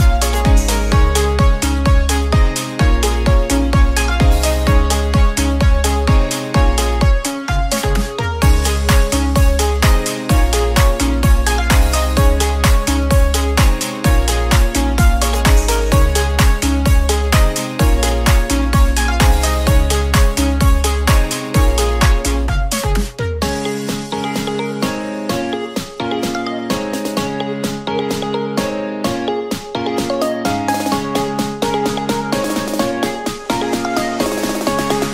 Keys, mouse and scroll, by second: 0.3-1.7 middle drag, 1.7 click, 4.7 r, 9.4 Tab, 10.1-11.7 middle drag, 11.7 click, 12.7 shift+a, 18.2 s, 19.8 drag, 21.2-21.8 middle drag, 21.8 click, 23.5 click, 24.1 scroll up 3, 24.3-25.2 shift+middle drag, 25.2 ctrl+r, 26.4 Tab, 28.4 ctrl+r, 30.3 click, 33.9 click, 34.9 a.